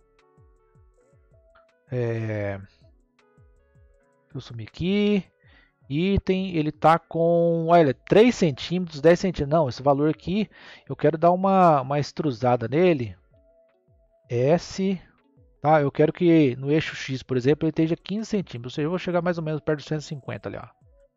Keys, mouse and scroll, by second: 1.8 click, 2.5 click, 3.8 n, 5.4 click, 11.0-11.5 scroll down 2, 11.5 scroll up 1, 12.2 scroll down 1, 14.2 s.